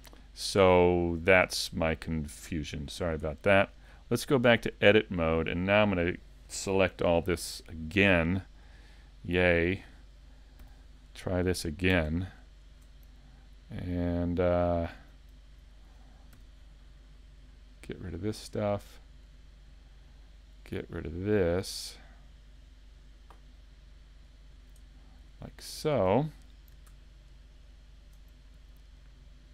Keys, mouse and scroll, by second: 0.8 shift+middle click, 1.7 middle click, 2.8 shift+middle click, 3.9 click, 5.2 middle click, 12.4 alt+shift+right click, 13.4 middle click, 16.4 c, 24.8 shift+middle click, 27.6 alt+shift+right click, 28.8 middle click.